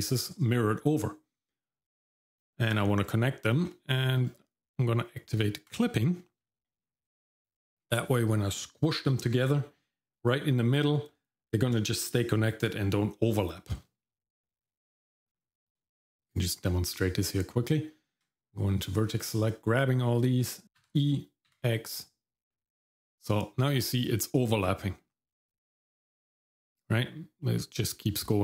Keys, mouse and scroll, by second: 3.5 middle click, 4.2 middle click, 5.7 click, 16.3 click, 17.7 Tab, 18.9 click, 20.6 ctrl+z, 20.8 e.